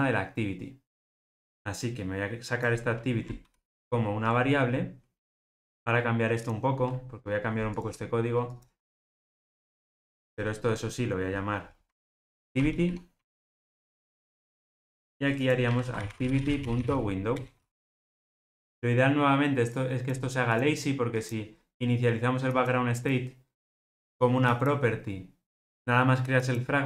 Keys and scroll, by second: 1.0 shift+super+z, 3.4 alt+super+v, 12.1 shift+F6, 17.4 Return.